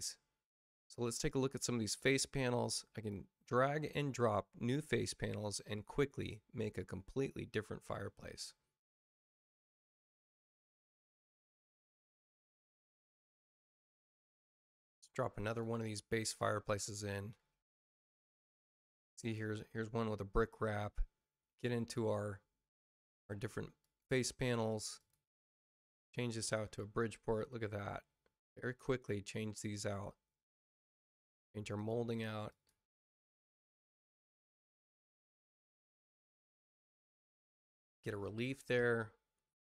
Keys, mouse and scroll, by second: 0.7 click, 1.8 click, 2.8 click, 11.5 click, 15.4 click, 16.6 click, 18.2 click, 21.3 middle click, 23.7 click, 24.9 click, 25.8 click, 30.4 click, 31.7 click, 32.4 click, 34.0 click, 34.8 click, 37.8 click, 38.5 click.